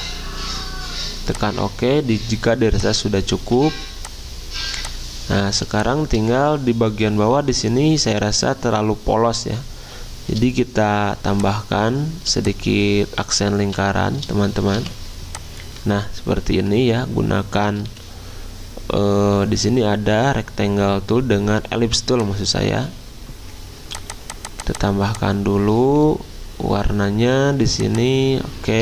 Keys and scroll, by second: 3.4 z, 19.0-19.8 typing.